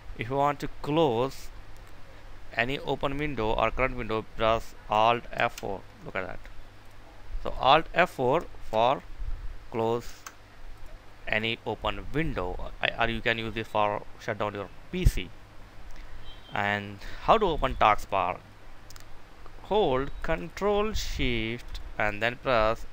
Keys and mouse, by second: 0.8 click, 5.2 F4, 6.4 right click, 7.4 click, 8.4 F4, 9.9 Escape, 10.6 right click, 11.0 click, 16.7 right click, 17.5 click, 22.7 Escape.